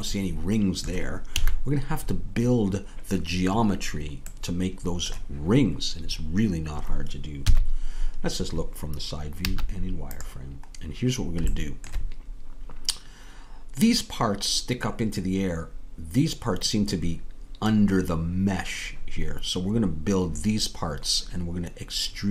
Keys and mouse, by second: 1.3 a, 7.5 KP_3, 9.4 z.